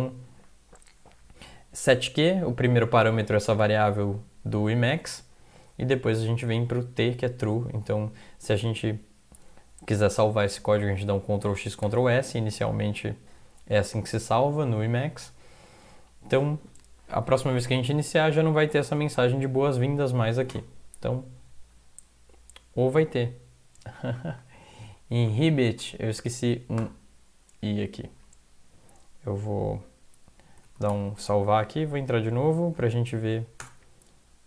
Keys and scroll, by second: 11.5 ctrl+x, 11.9 ctrl+s, 18.9 alt+F4, 19.8 Up, 20.5 Return, 24.2 Down, 24.5 Right, 25.0 Right, 25.5 Right, 25.5 Right, 25.7 Right, 26.8 i, 30.7 ctrl+x, 30.9 ctrl+s, 31.8 alt+F4, 32.2 Up, 32.2 Down, 33.2 Up, 33.6 Return.